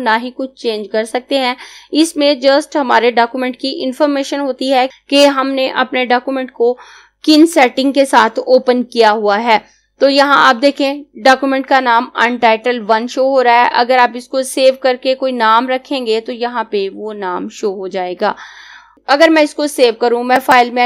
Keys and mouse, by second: 20.4 click.